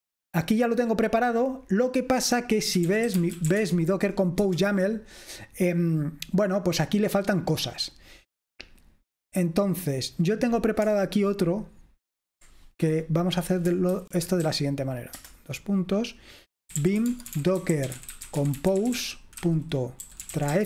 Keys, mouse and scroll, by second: 2.6-4.4 typing, 8.7-11.1 drag, 13.4 click, 14.2-15.2 typing, 16.5-20.6 typing.